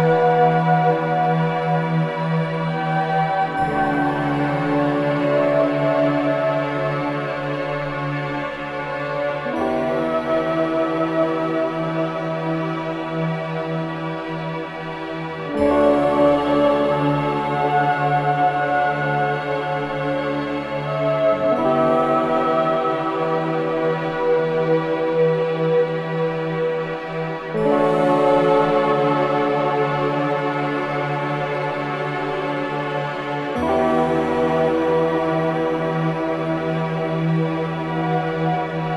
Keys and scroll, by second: 1.2 4, 10.5 0, 10.6 Return, 10.9 0, 11.1 Return, 11.7 F1, 17.7 ctrl+z, 21.4 2, 35.4 4.